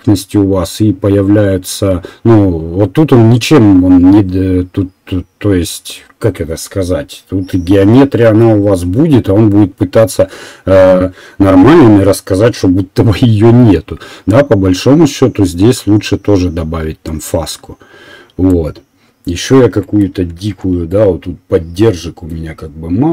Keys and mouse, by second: 20.4 shift+z.